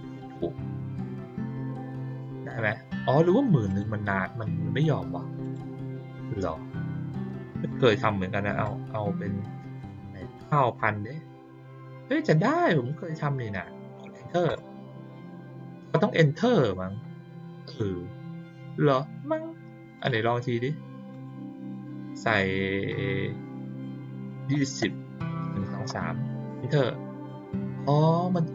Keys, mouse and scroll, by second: 2.0 click, 2.5 click, 3.6 click, 5.4 click, 19.9 click, 21.1 click.